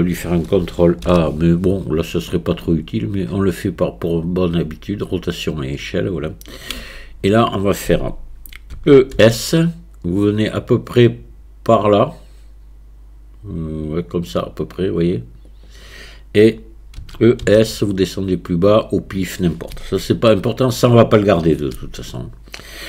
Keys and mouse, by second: 1.1 ctrl+a, 6.8 Tab, 8.8 e, 17.0 e, 20.3 shift+click.